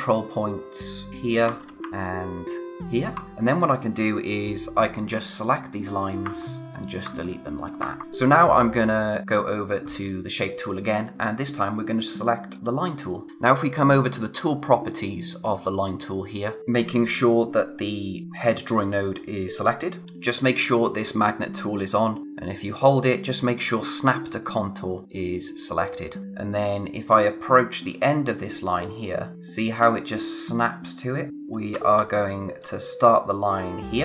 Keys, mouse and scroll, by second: 1.1 ctrl+click, 1.6 space, 2.7 ctrl+click, 3.2 scroll down 1, 3.2 click, 6.6 click, 8.0 space, 8.8 click, 14.0 click, 16.6 scroll up 1, 22.0 click, 26.2-27.9 scroll up 1, 31.3-31.6 scroll up 1, 31.6 space, 31.9 scroll down 1, 32.0 space, 32.2 click, 32.5 space.